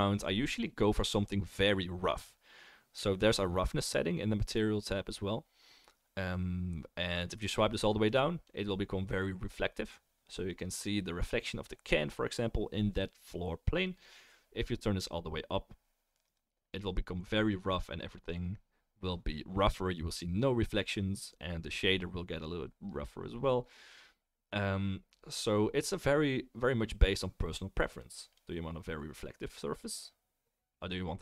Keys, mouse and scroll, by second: 6.7-31.2 middle drag, 8.1-13.1 drag, 24.8-31.2 drag, 24.8-31.2 right drag.